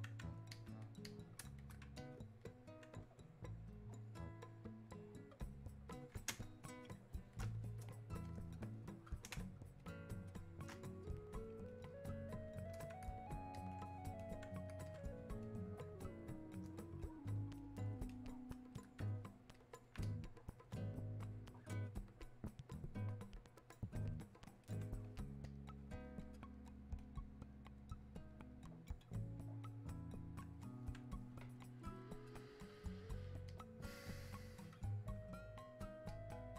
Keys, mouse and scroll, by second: 1.1 click, 2.0-5.0 alt+drag, 5.0-6.3 drag, 6.3 space, 8.3 click, 9.4 space, 9.8 click, 10.1 space, 11.0 click, 11.9 click, 13.6 alt+click, 14.2 click, 15.1 alt+click, 15.5-19.6 drag, 20.3-29.9 drag, 29.9-33.5 drag, 36.1 click.